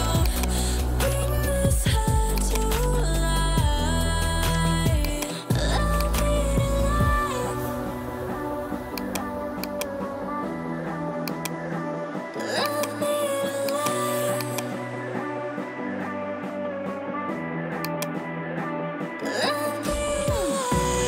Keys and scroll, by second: 15.6 alt+BackSpace, 20.3 [.